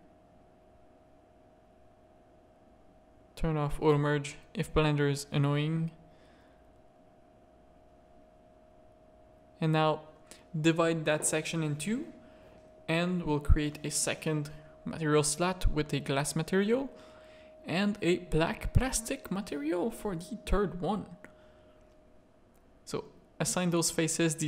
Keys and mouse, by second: 0.6 ctrl+z, 1.8 click, 2.5 ctrl+r, 5.2 Tab, 5.4 middle click, 5.7 middle click, 6.1 alt+a, 6.2-6.6 middle drag, 6.7 z, 7.0 middle click, 8.0 z, 8.2 middle click, 8.5 Tab, 8.6 a, 9.3 ctrl+r, 10.6 3, 11.9 z, 13.4 click, 14.3-15.6 drag, 17.3 click, 18.4-21.4 drag, 22.0 click, 23.1 click.